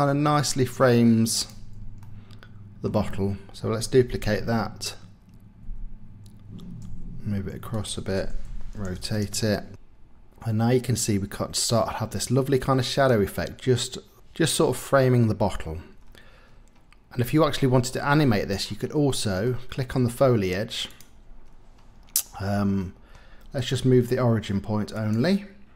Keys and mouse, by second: 2.2 middle click, 2.8 click, 4.1 shift+d, 5.6 x, 6.8 y, 8.2-9.4 typing, 9.4 KP_Enter, 12.9 click, 16.5 middle click, 18.1 middle click, 19.1 middle click, 19.7 middle click, 21.5 middle click, 22.8 middle click, 24.9 click.